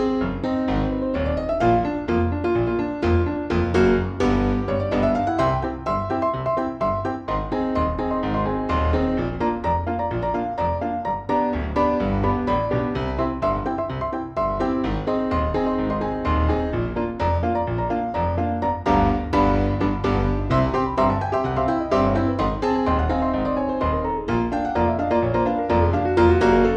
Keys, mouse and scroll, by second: 1.7 shift+r, 2.6 click, 4.0-8.5 drag, 9.3 KP_Subtract, 11.6 click, 12.6-14.3 drag, 16.0 click, 19.0 KP_5, 20.3 F1, 22.4 click, 24.4 click, 26.2 ctrl+l.